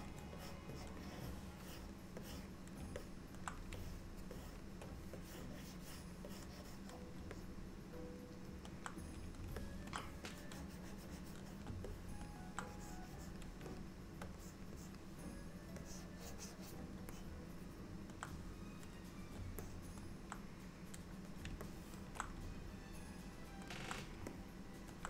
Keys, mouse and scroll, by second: 0.5 click, 0.8 click, 1.1 click, 2.3 click, 3.0 middle click, 3.9-4.6 shift+click, 4.4 shift+click, 5.3 click, 6.4 click, 7.4 middle click, 9.7 ctrl+middle click, 10.3 click, 12.0 middle click, 12.8 click, 13.8 shift+click, 14.5 click, 14.8 click, 15.9 click, 17.2 middle click, 19.6 middle click, 21.7 ctrl+middle click, 21.8 ctrl+middle click, 22.8 middle click, 24.4 middle click.